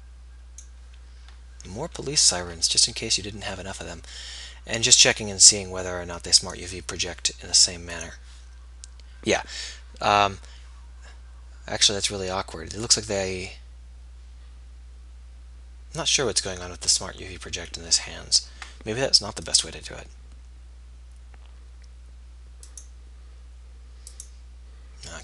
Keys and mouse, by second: 11.3-19.7 middle drag, 19.7-21.3 drag, 21.3-25.2 middle drag.